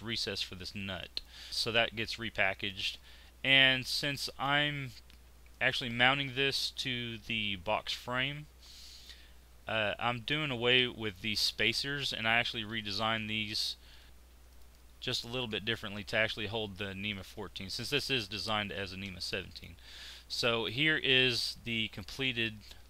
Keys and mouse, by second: 3.0 click, 3.8-5.5 middle drag, 5.9 click, 12.5 x, 19.8 z.